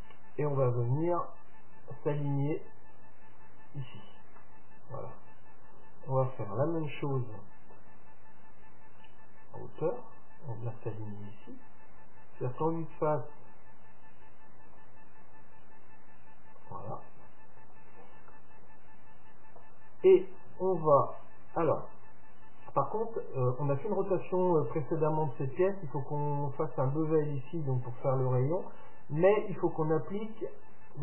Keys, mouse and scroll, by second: 4.5-10.0 middle drag, 6.1-7.3 scroll up 1, 9.1-11.0 drag, 11.2-13.2 middle drag, 12.7 KP_3, 14.3-17.1 drag, 18.4-22.2 middle drag.